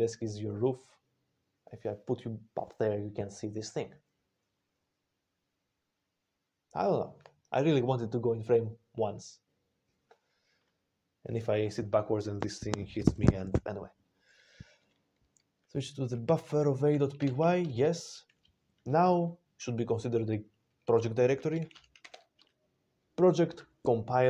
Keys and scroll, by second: 17.1 Return, 21.6-22.5 typing.